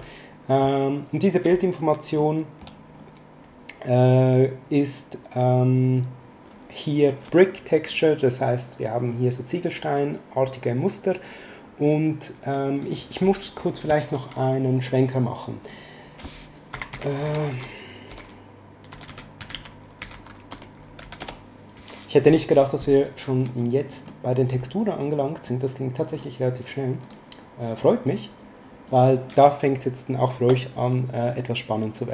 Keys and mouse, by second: 2.1 middle click, 11.9 click, 14.7 click, 16.6-21.5 typing, 27.0 click.